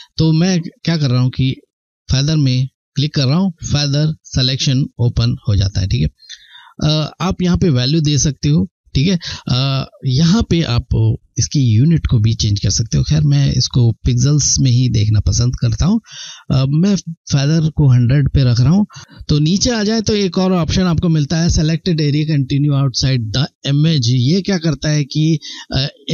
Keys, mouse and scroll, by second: 1.2 click, 9.8 click, 14.2 click.